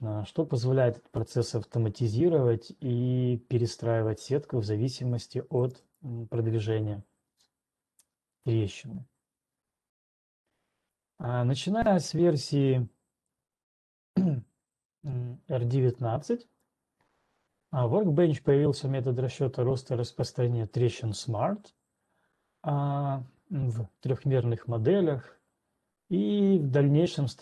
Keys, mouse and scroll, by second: 6.1 right click, 6.6 right click, 8.1-9.1 scroll, 9.8 scroll, 11.2-11.5 scroll, 14.1 ctrl+2, 14.1-14.6 scroll, 18.7-19.7 scroll.